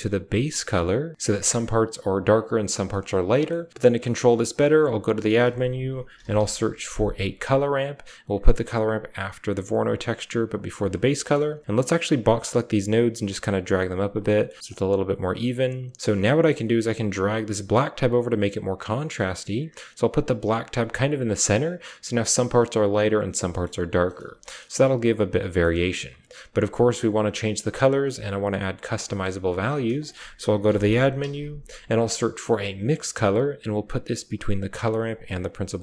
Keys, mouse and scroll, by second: 0.4-1.2 typing, 3.3 middle click, 4.6 shift+a, 9.9 click, 10.3 click, 11.0 middle click, 11.1-12.6 typing, 11.8 click, 12.4 middle click, 12.8-14.0 drag, 14.3 drag, 14.6 click, 15.3-15.8 drag, 15.8-16.6 typing, 16.6-20.2 drag, 20.4 click, 23.4 click, 24.3 shift+middle click, 25.4 drag, 26.0 click, 27.0 typing, 28.9 click, 29.5 shift+a, 35.2 click.